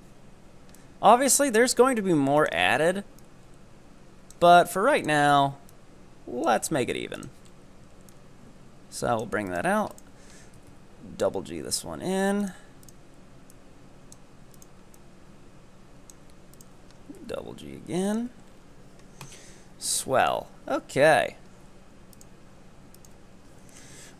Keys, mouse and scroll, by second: 7.5-8.2 scroll up 2, 8.2-9.5 drag, 9.5 right click, 10.0 ctrl+right click, 10.7 g, 12.8 right click, 13.5-14.6 drag, 14.6 right click, 15.0-16.7 drag, 16.7 ctrl+Right, 16.7 right click, 17.3 g, 18.4 Tab, 18.6-20.1 scroll down 5, 20.1-20.8 shift+middle drag, 20.8 Tab, 21.1-22.2 scroll up 1, 22.2 right click, 23.0 ctrl+right click, 23.6 scroll down 2, 23.8 Tab.